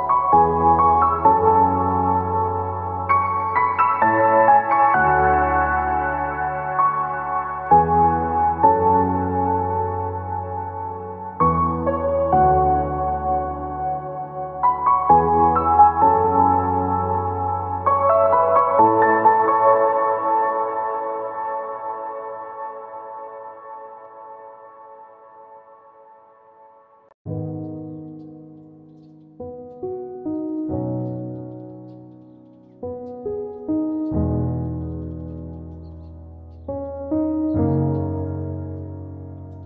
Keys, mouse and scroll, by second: 0.3 click, 1.2-3.6 drag, 4.4 Tab, 4.5-5.1 scroll down 2, 4.9-6.6 middle drag, 7.1-7.4 scroll up 2, 11.9 click, 13.0-16.6 shift+drag, 17.5 click, 18.5 KP_1, 19.5-20.5 shift+middle drag, 21.2 shift+a, 29.4-31.6 drag, 32.8-39.6 drag, 33.9 KP_0.